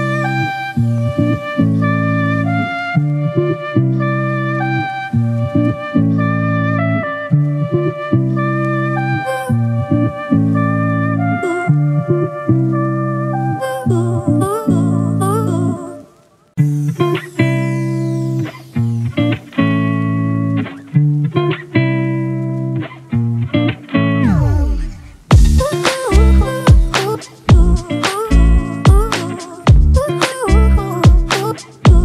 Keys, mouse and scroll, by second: 23.8 alt+click, 31.1 right click.